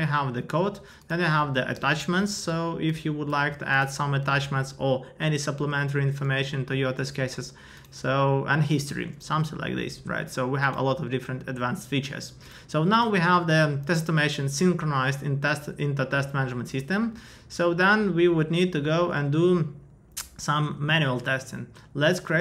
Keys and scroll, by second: 3.3 ctrl+a, 4.2 super+v.